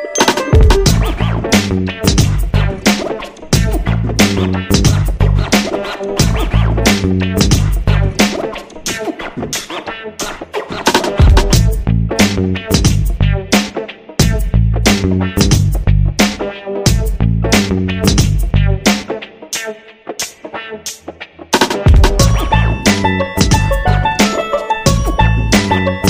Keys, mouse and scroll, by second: 2.9 shift+click, 4.9 shift+click, 6.5 ctrl+shift+g, 7.4 click, 8.0 shift+click, 8.7 shift+click, 10.4 click, 12.4 ctrl+scroll down 1, 13.2 click, 13.8 shift+click, 15.1-16.5 shift+drag, 18.0 click, 19.9 ctrl+scroll up 1, 22.1 click.